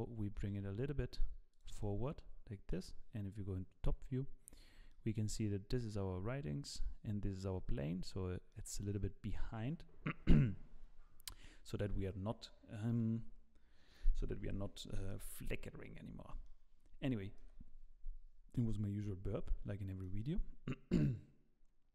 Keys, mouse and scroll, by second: 1.8 middle click, 3.4 KP_7, 4.4-4.7 scroll up 5, 4.9 shift+middle click, 5.8 click, 6.7 click, 8.0-8.6 scroll down 8, 8.5 middle click, 9.3-9.7 scroll down 3, 16.5 middle click, 17.4 KP_0, 19.8-20.2 scroll down 2, 20.0 middle click.